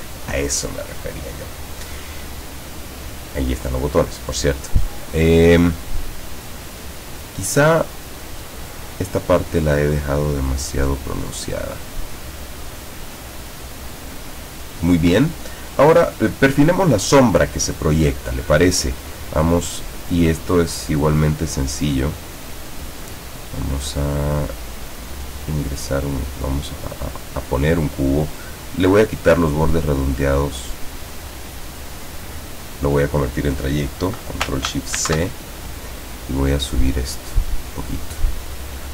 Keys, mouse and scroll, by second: 2.2 click, 8.5 click, 10.0-12.3 drag, 15.8 click, 19.2 click, 22.2-28.3 drag, 29.0-31.7 drag, 32.7 click, 35.0 ctrl+shift+c, 37.0-38.7 drag.